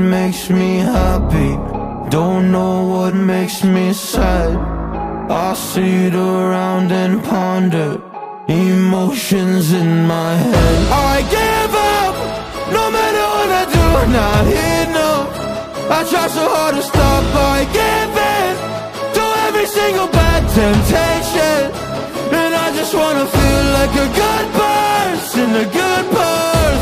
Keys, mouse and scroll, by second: 0.1 right click, 0.7-2.1 middle drag, 1.8 click, 2.1-2.7 right drag, 2.7 middle click, 3.4-8.0 drag, 5.7 KP_1, 6.9 g, 8.0-20.3 middle drag, 8.9 a, 9.1 Tab, 12.2 click, 12.9-26.8 drag, 20.4-20.8 alt+middle drag, 21.0-21.6 alt+middle drag, 21.8 alt+middle click, 25.8-26.8 right drag.